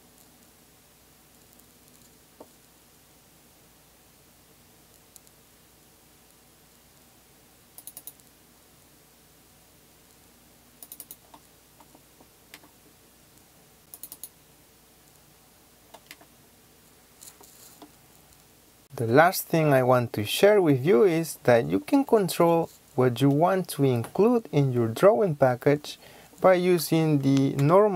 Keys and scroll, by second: 27.5-27.9 typing.